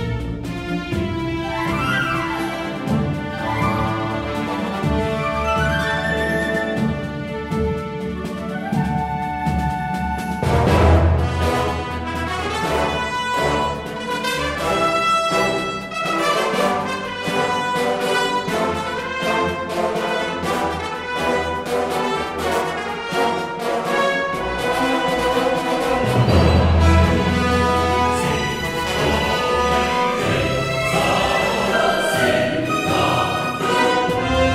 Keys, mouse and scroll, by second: 4.3 ctrl+j, 5.5 Tab, 6.0 a, 11.8 ctrl+r, 15.8 ctrl+r, 18.7 ctrl+r, 21.9 ctrl+r, 23.6 ctrl+r, 25.1 ctrl+r, 28.1 middle click, 29.3 ctrl+Tab, 31.4 KP_Subtract, 31.4-33.6 drag, 31.9 KP_Subtract.